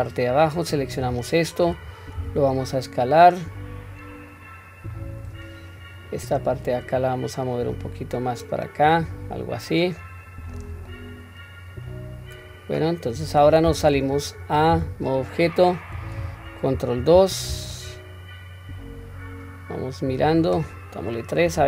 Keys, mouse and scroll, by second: 0.3-1.0 drag, 2.2 s, 5.8 click, 7.0-8.9 drag, 10.0-10.6 middle drag, 10.9-13.5 middle drag, 13.9 Tab, 14.7 q, 15.6 scroll down 1, 16.7 ctrl+2, 17.7-20.8 middle drag.